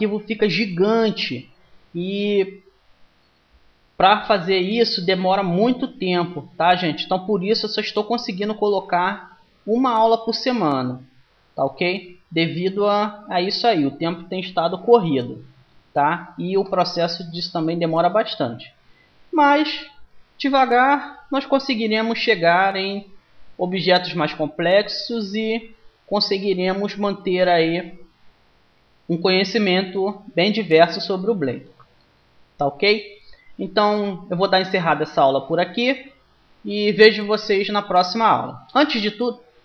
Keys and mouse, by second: 4.8-6.5 drag, 7.3 middle click, 9.5-11.8 middle drag, 11.0 Tab, 12.7 Tab.